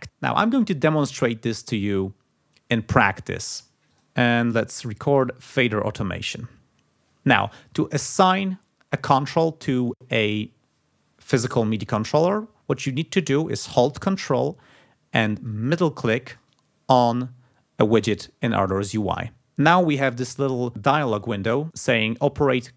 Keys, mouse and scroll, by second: 4.6 click, 5.8 click, 6.6 scroll down 2, 16.2 ctrl+click.